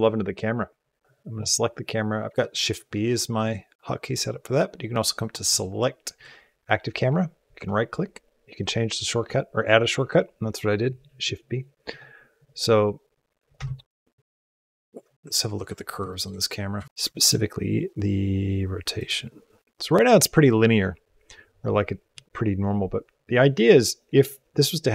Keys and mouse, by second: 1.0 Tab, 1.0 shift+b, 3.3-5.1 drag, 5.5-10.8 drag, 12.3 click, 12.6-13.5 drag, 13.5 space, 15.0 space, 15.3 ctrl+Tab, 16.0 shift+middle click, 16.6 a, 17.0 shift+middle click, 18.8 click, 19.5-21.6 drag.